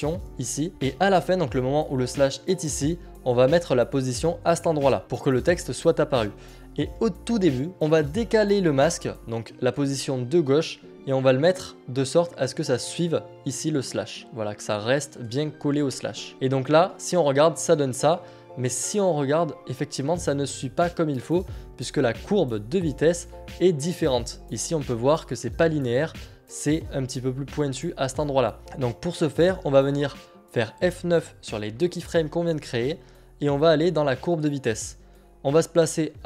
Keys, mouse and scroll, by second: 4.8 click, 10.4 click, 20.5 click, 25.2 click, 29.2 click, 33.7 click.